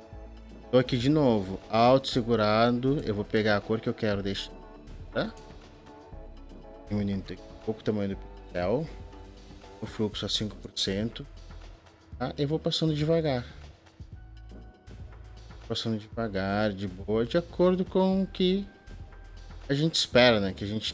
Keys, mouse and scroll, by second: 3.2 alt+click, 5.3 alt+click, 5.9 alt+click, 6.3 alt+click.